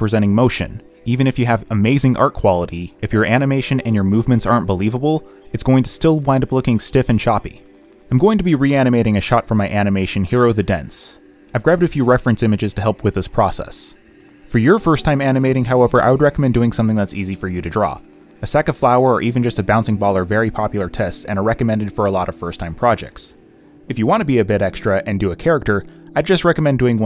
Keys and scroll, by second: 2.9 b, 14.9 z, 16.6 ctrl+z, 17.0 ctrl+z, 17.4 ctrl+z, 18.9 space, 19.6 ctrl+z, 20.6 ctrl+z, 20.9 space, 21.1 z, 21.3 space, 21.5 z, 23.1 space, 23.6 b, 24.1 ctrl+z, 25.5 ctrl+z.